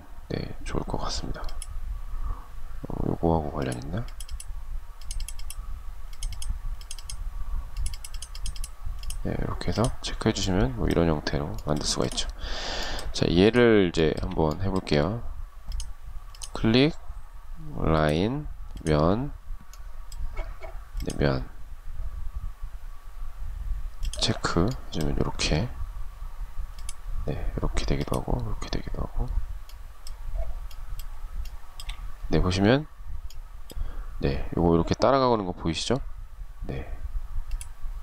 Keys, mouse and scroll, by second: 13.2 shift+middle click, 30.7 shift+middle click.